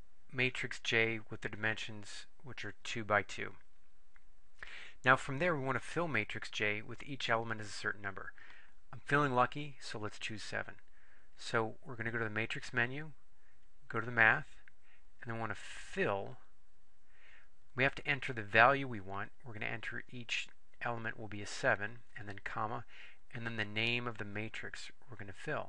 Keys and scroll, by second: 13.6 Right, 16.3 4, 20.7 7, 22.1 ,.